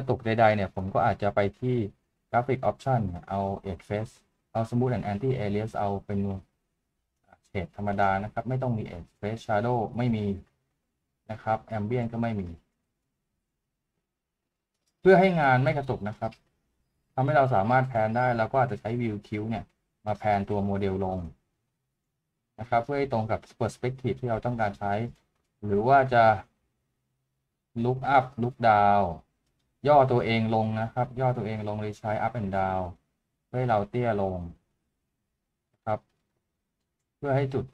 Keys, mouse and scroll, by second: 15.0 middle click, 17.6 middle click.